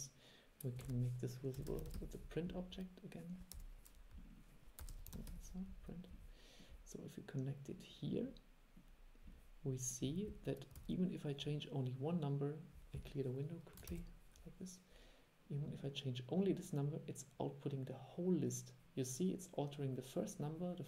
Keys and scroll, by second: 0.9 super+1, 10.9 super+e, 14.0 shift+super+l.